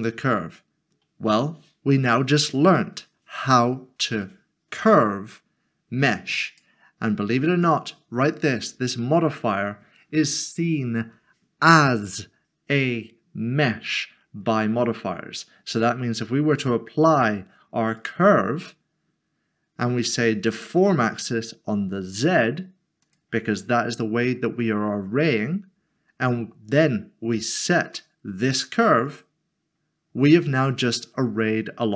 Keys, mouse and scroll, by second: 0.3-0.6 scroll up 1, 2.4 click, 6.4 click, 16.5 click, 20.5 click, 23.0 click, 27.4 click, 30.1 scroll down 1.